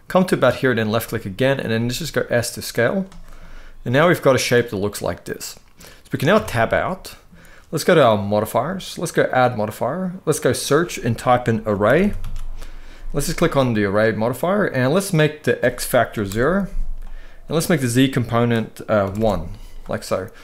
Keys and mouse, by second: 0.3 click, 0.7 middle click, 1.4 s, 2.6 click, 3.1-5.4 middle drag, 6.0 Tab, 6.5 middle click, 8.1 click, 9.0-13.5 drag, 11.7 r, 15.2 click, 17.3-18.9 drag.